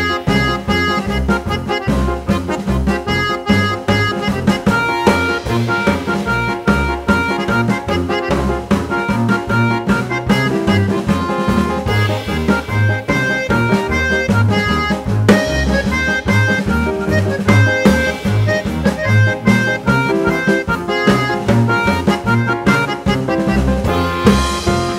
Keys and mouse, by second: 1.9-3.3 drag, 2.7 0, 4.4-6.2 drag, 7.8 g, 9.4-12.2 drag, 13.8-14.7 drag, 17.7-19.0 drag, 18.7 0, 20.3 click, 21.8-22.6 drag, 23.6-24.8 drag.